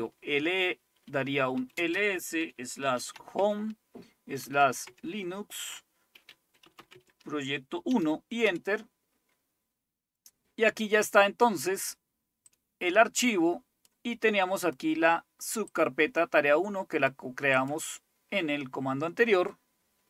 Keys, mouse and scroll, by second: 0.0 typing, 1.6-8.4 typing, 12.5-14.0 drag, 14.6 click, 15.7-17.2 drag, 17.3-18.5 drag.